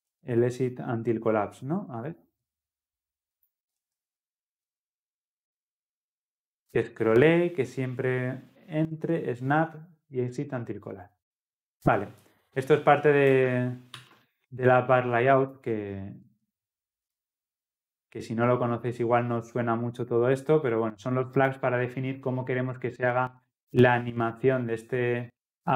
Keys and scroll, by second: 16.3 ctrl+v.